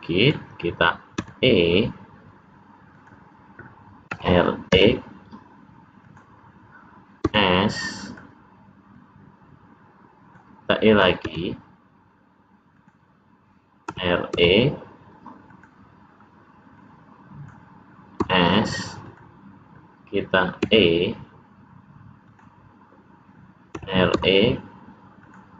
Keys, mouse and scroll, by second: 1.1 e, 4.0 r, 7.2 s, 8.8 click, 11.2 e, 13.8 r, 16.7 click, 18.1 s, 20.5 e, 23.7 r.